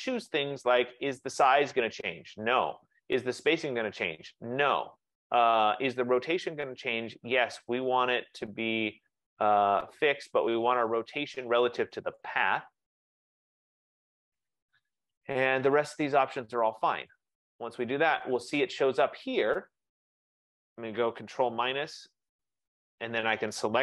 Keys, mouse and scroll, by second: 6.8 click, 10.1 click, 11.0 click, 12.4 click, 15.6 F15, 17.2 click, 21.7 ctrl+-, 22.1 ctrl+-, 22.5 ctrl+-.